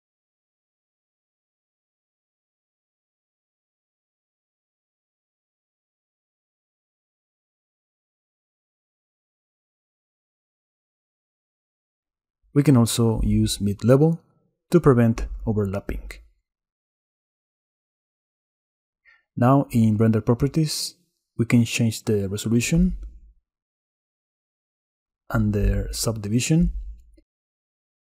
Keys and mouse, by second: 1.8 middle click, 2.7 middle click, 3.4 middle click, 6.2 click, 6.5 middle click, 7.8 middle click, 9.2 middle click, 10.2 middle click, 10.6 middle click, 11.4 middle click, 11.8 shift+click, 12.4-12.8 drag, 12.6 middle click, 12.6 right click, 14.3 shift+click, 14.6-19.0 shift+middle drag, 26.8 click, 27.8 click.